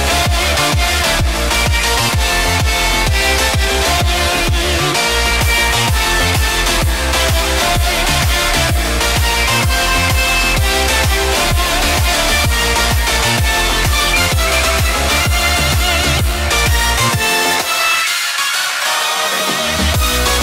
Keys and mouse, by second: 15.6-20.4 drag.